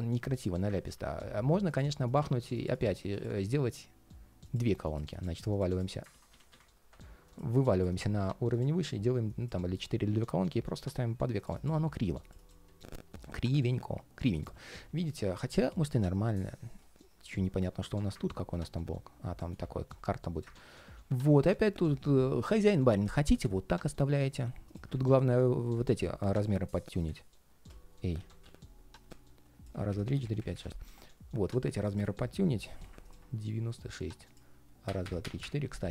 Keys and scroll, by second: 0.6 super+z, 3.2 ctrl+shift+4, 5.8 super+z, 14.3 ctrl+shift+4, 20.7 super+z, 27.9 super+z, 32.3 alt+space.